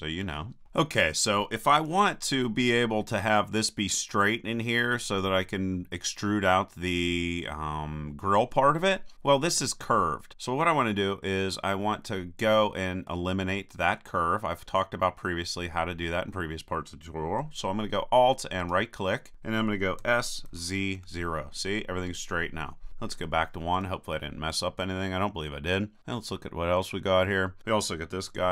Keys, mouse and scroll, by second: 0.6 a, 1.8 KP_1, 11.8-13.1 middle drag, 13.6-18.6 middle drag, 18.6-20.0 right drag, 20.0 s, 23.8 KP_1, 26.0 click, 26.7 middle click.